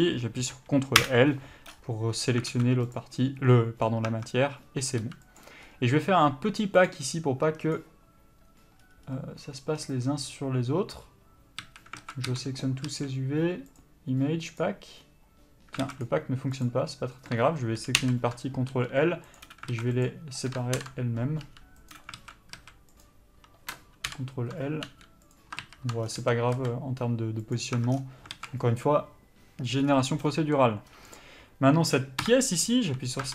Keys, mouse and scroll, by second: 2.0 scroll up 1, 2.5 scroll down 1, 3.7 middle click, 5.2 s, 12.2 alt+a, 16.9 click, 18.9 g, 23.3 click, 24.3 ctrl+l, 26.8 s, 28.0 Tab, 28.2 scroll down 1.